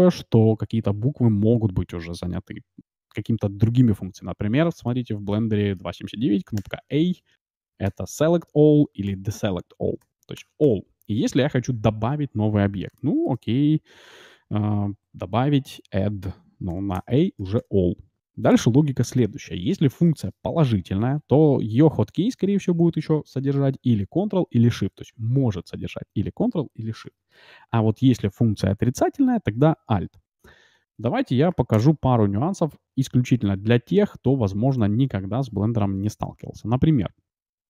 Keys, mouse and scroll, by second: 4.5-7.5 middle drag, 6.5 a, 7.8 a, 9.0 a, 10.0 a, 10.3 a, 10.6 a, 11.7 a, 12.6-12.9 scroll up 1, 12.9-14.8 middle drag, 16.7-18.5 typing, 30.7 a, 31.5 Delete, 33.3 shift+s, 36.2 shift+a.